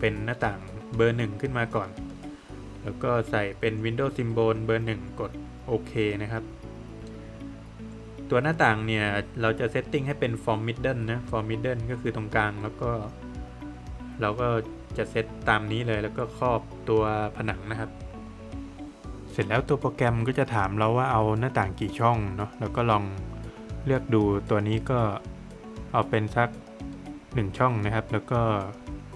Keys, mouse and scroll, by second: 14.8 click, 16.3 click, 25.1 BackSpace, 26.4 Return.